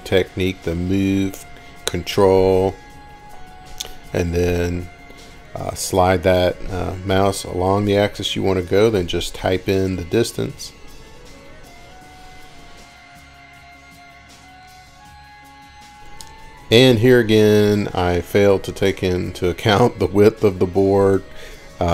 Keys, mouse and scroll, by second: 2.0 click, 2.6 ctrl+click, 14.7 8, 16.1 ', 16.2 Return, 18.1-18.6 scroll, 20.0 scroll down 6, 20.6 scroll, 20.9 scroll up 1, 21.0 ctrl+shift+r.